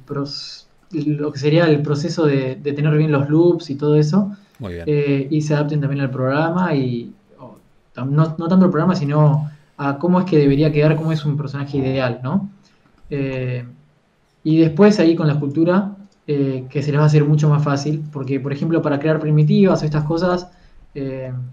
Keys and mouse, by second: 1.6 s, 2.4 g, 6.3 s, 13.8 Tab, 14.8 KP_3, 15.0 Tab, 17.1 g, 17.3 f, 21.3 click.